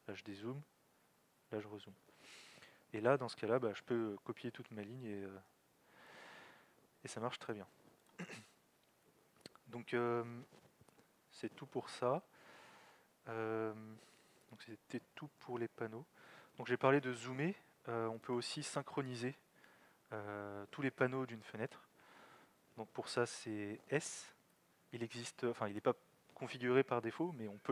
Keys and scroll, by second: 0.2 z, 1.1 alt+x, 1.4 z, 8.8 alt+x, 9.0 z, 23.8 alt+x, 24.5 s.